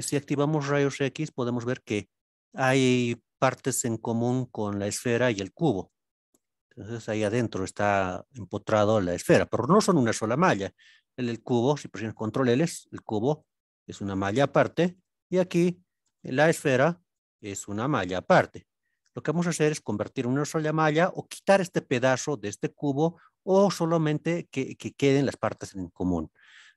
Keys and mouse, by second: 0.8 alt+z, 1.3-2.2 middle drag, 2.8-3.3 middle drag, 4.3-4.7 middle drag, 5.9 alt+z, 6.6-6.9 middle drag, 8.0-9.7 middle drag, 12.1 ctrl+l, 12.6 middle drag, 13.4 g, 14.3 click, 16.1 ctrl+l, 17.1 g, 18.4 click, 24.1 middle click.